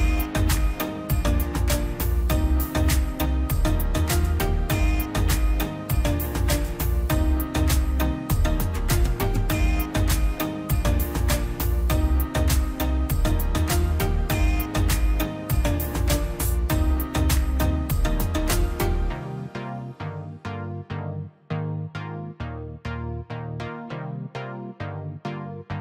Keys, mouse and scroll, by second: 0.3 ctrl+z, 0.7 scroll down 1, 2.9 scroll up 1, 3.4 click, 3.7 scroll up 1, 3.9 click, 4.8-5.5 scroll up 1, 5.7 click, 5.9 scroll down 1, 7.9 scroll up 1, 8.5 click, 11.5-11.9 scroll down 1, 12.2 click, 12.5 scroll down 1, 14.5 click, 15.5 p, 15.8-17.5 drag, 17.5 middle click, 18.2 ctrl+z, 19.0 scroll down 1, 20.2-21.5 drag, 21.5-21.9 scroll up 1, 21.9 click, 22.2 scroll down 1, 22.4 middle click, 22.8 scroll up 1, 23.2 click, 24.0 scroll down 1, 24.5 click, 24.5 scroll up 1, 24.5 click.